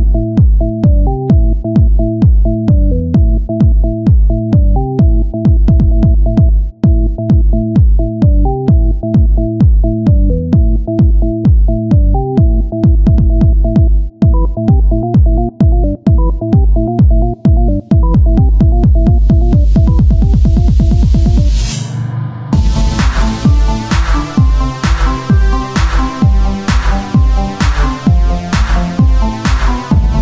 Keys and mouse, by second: 0.3 Tab, 0.7 KP_1, 2.1 click, 3.5 Tab, 4.0 z, 4.7 c, 5.8 KP_1, 7.3 o, 7.7 s, 11.7 z, 18.8 KP_1, 19.2 z, 22.6-24.4 drag, 24.4 KP_1, 25.3-26.7 drag, 26.2 z, 27.9-30.2 drag.